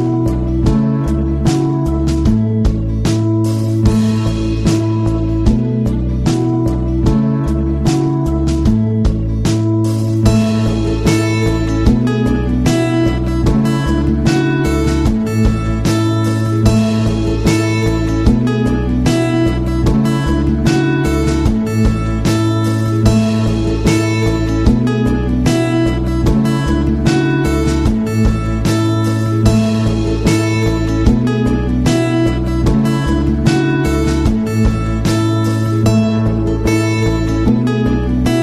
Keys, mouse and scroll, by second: 9.0-15.5 drag, 23.1 right click, 26.2 click, 28.2-29.2 typing, 30.5-35.0 drag, 38.1-38.4 drag.